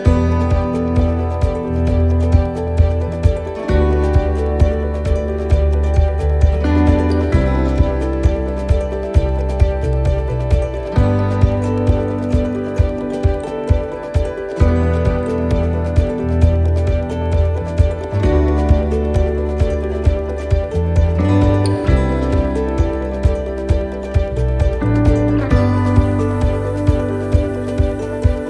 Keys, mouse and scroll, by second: 0.3 click, 2.6 shift+middle click, 4.8 click, 8.4 middle click, 9.4 middle click, 10.5 shift+middle click, 11.0 scroll up 2, 11.3 middle click, 11.9 shift+middle click, 12.5 middle click, 13.3 right click, 13.9 alt+shift+right click, 14.4 middle click, 15.2 right click, 15.9 alt+shift+right click, 16.6 middle click, 17.0-17.4 scroll up 3, 17.9 alt+shift+right click, 18.7 right click, 19.6 right click, 19.8 alt+shift+right click, 20.1 alt+shift+right click, 20.6 middle click, 21.6 click, 23.5 right click, 24.0 alt+shift+right click, 25.2 click, 27.2 right click, 27.8 alt+shift+right click, 28.4 scroll up 1.